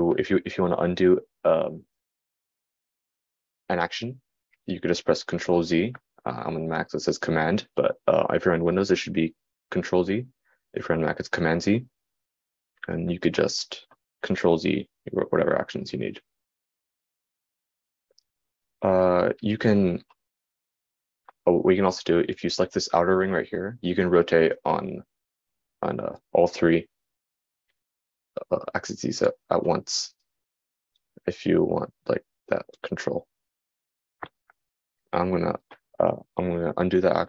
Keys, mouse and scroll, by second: 16.1 super+z, 22.8 super+z.